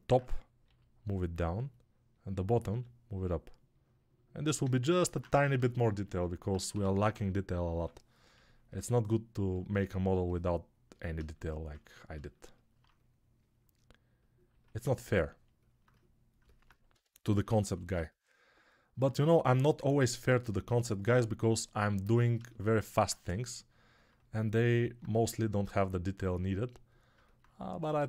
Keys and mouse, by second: 0.5 g, 2.5 g, 4.5 alt+click, 5.3 ctrl+Tab, 6.6 g, 7.0-7.7 ], 9.1 click, 9.1 middle click, 9.1 right click, 16.8-17.6 typing, 25.5-28.0 alt+drag, 25.5-28.0 alt+middle drag, 25.5-28.0 alt+right drag.